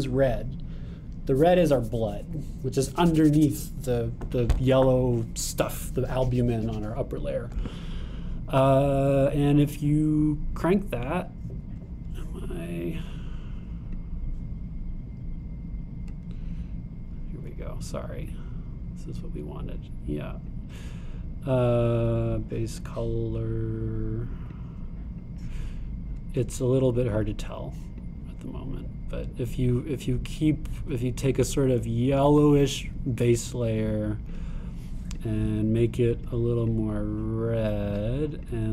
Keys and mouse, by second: 10.4 click, 22.7-24.5 middle drag.